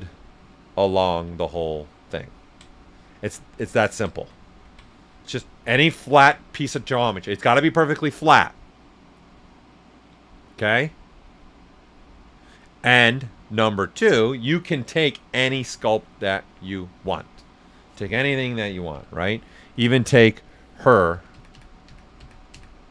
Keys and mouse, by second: 2.9 right click, 4.4 ctrl+z, 4.9 alt+right click, 18.9 ,, 20.3 click, 21.1 ctrl+z.